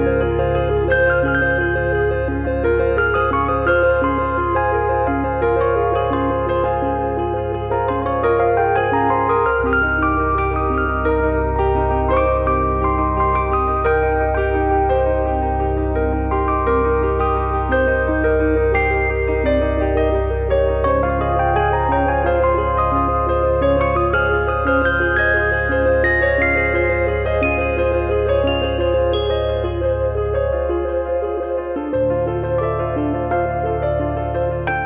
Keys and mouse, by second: 0.5 click, 2.7 click, 4.2 click, 4.9 click, 6.2 middle click, 8.5 click, 9.5 middle click, 10.5 middle click, 10.8 middle click, 11.0 middle click, 14.3 click, 14.8 middle click, 15.0 middle click, 19.8 middle click, 20.9 click, 21.8 click, 22.1 click, 23.4 click, 24.8 click, 25.1 click, 27.0 middle click, 30.3 click, 32.4 click, 33.4 click.